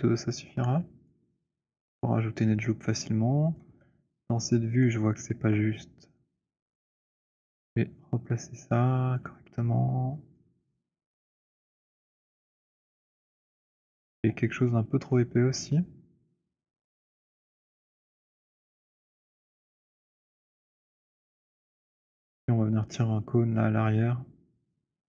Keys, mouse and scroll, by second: 1.0 click, 3.6-4.0 scroll, 3.6 w, 4.4-5.3 scroll, 5.3-6.0 alt+scroll, 9.1 click, 9.3 middle click, 9.6 middle click, 9.7 middle click, 10.4 alt+middle click, 11.0 alt+middle click, 11.2-13.3 scroll, 13.5 click, 14.2 t, 18.5 click, 18.9 w, 21.9 click.